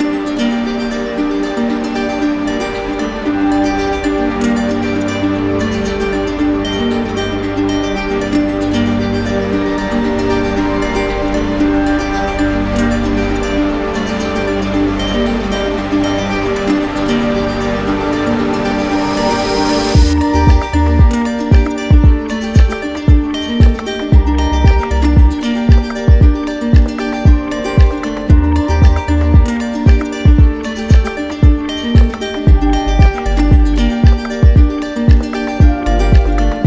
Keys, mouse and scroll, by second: 0.1 shift+click, 0.5 shift+click, 0.9 shift+click, 1.2 shift+click, 1.6 shift+click, 2.0 shift+click, 2.3 shift+click, 2.8 shift+click, 3.8 shift+click, 5.3 shift+click, 5.3 right click, 6.2 click, 7.6 shift+click, 9.2 d, 9.6 d, 9.7 d, 10.9 d, 12.7 click, 14.6 right click, 15.8 alt+click, 16.8 alt+click, 17.7 alt+click, 18.3 alt+click, 19.0 alt+click, 19.6 alt+click, 20.6 click, 21.4 right click, 22.6 alt+click, 23.4 alt+click, 25.8-27.2 typing, 27.9 right click, 28.4 right click, 29.1 right click, 29.9 right click, 35.4 right click, 36.0 alt+right click.